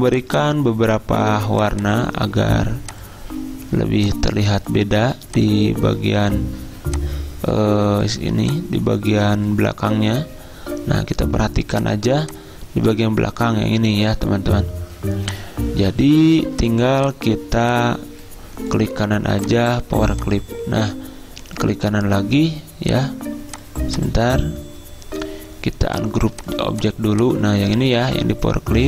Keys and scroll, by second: 28.0 ctrl+z.